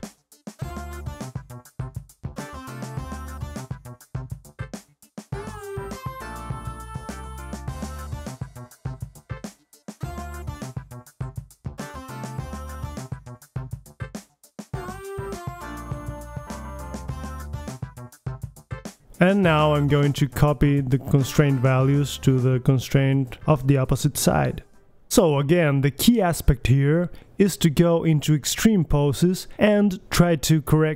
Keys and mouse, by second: 1.1 right click, 1.3 click, 1.6 middle drag, 1.8-2.7 drag, 2.7 middle click, 3.1 click, 3.1 right click, 4.3-4.8 middle drag, 4.5 f, 5.0-5.8 drag, 7.2-7.6 drag, 8.2-8.6 drag, 8.6-10.2 middle drag, 10.2 drag, 10.2-10.8 right drag, 10.6 click, 10.8-13.5 middle drag, 13.6 click, 13.8 middle click, 14.3 middle click, 14.4-15.5 right drag, 15.2 KP_3, 15.5-16.0 middle drag, 15.7 g, 17.2 drag, 17.4-18.7 middle drag, 18.7 KP_3, 19.7 click, 19.7 right click, 19.7 alt+g, 19.8 middle click, 20.5 click, 21.7-22.5 middle drag, 22.5 click, 23.1 right click, 24.1 right click, 24.2 middle click, 25.1-26.2 right drag, 26.2 middle click, 26.5 click, 27.4-28.4 drag, 28.4-30.0 middle drag, 28.6 KP_3, 29.2 KP_1, 30.4 middle click, 30.6 right click.